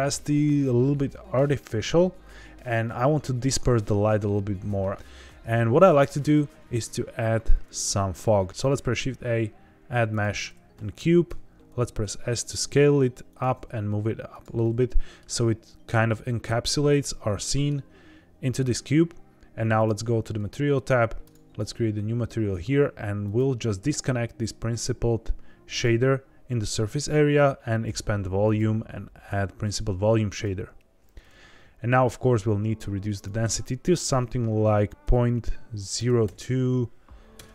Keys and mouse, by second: 6.6 shift+a, 8.5 shift+a, 11.2 s, 13.2 click, 13.4 g, 13.5 z, 14.3 click, 14.5-15.2 middle drag, 16.8-17.6 middle drag, 19.7 click, 21.2 click, 23.3-25.8 drag, 27.7 click, 28.5-30.4 drag, 33.1-37.5 drag.